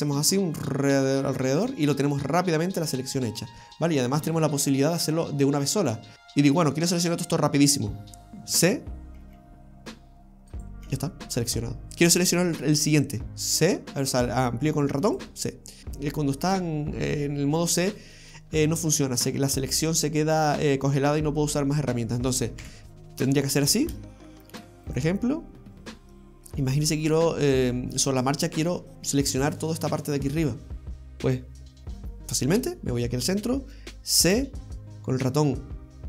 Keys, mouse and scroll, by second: 0.0 alt+shift+right click, 0.0 c, 6.1 click, 6.1 right click, 6.1 a, 9.2 c, 15.8-16.8 scroll down 3, 22.6 KP_7, 23.3-24.2 scroll down 12, 24.2 shift+middle click, 24.9 right click, 25.5-26.0 scroll up 2, 26.2 shift+middle click, 34.3 c.